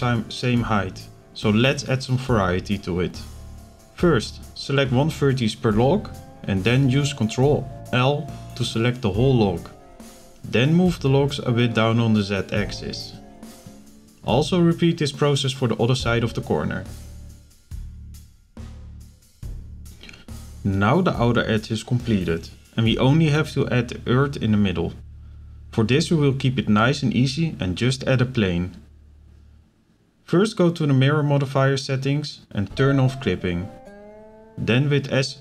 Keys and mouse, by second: 0.3 ctrl+l, 2.6 ctrl+click, 3.5 ctrl+l, 4.6 shift+click, 6.9-8.8 drag, 10.3 click, 10.8 shift+middle click, 11.6-12.9 shift+drag, 14.5 ctrl+l, 15.6-16.7 middle drag, 16.7 click, 18.2-20.7 shift+drag, 21.2 ctrl+l, 23.1-25.0 drag, 25.4 click, 25.9 middle click, 28.1-29.5 drag, 32.0 click, 32.6 KP_7, 33.6 middle click, 34.3 KP_7.